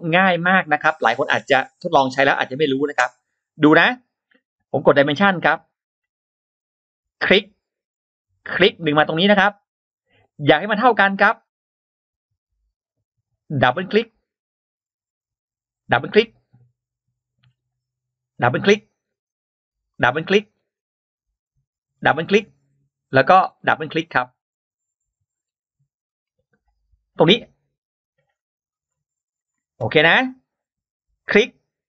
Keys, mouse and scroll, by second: 0.6-0.9 scroll down 2, 1.1-1.4 scroll up 2, 1.5 click, 5.3 click, 7.0 click, 8.4 click, 9.6 click, 13.7 click, 13.9 click, 15.6 click, 15.8 click, 18.2 click, 18.3 click, 19.7 click, 19.9 click, 20.3 scroll down 2, 20.6-21.0 scroll up 2, 21.8 click, 21.9 click, 23.4 click, 23.6 click, 24.3 scroll up 2, 25.2-25.5 scroll down 2, 25.8 scroll up 2, 27.0 click, 28.2 click, 29.2 click, 31.1 click.